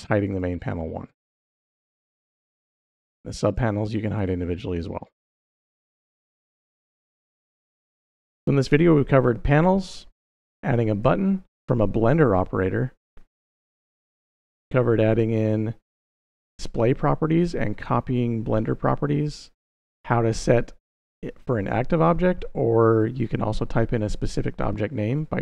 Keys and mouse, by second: 0.1 click, 0.4 click, 0.9 click, 1.2 click, 2.3 click, 3.3 click, 3.9 click, 4.5 click, 6.0 click, 6.9-8.7 middle drag, 9.9 middle click, 10.1 click, 10.1 middle drag, 10.7 click, 11.3 click, 13.0-13.6 middle drag, 14.3 middle click, 25.2-25.4 drag.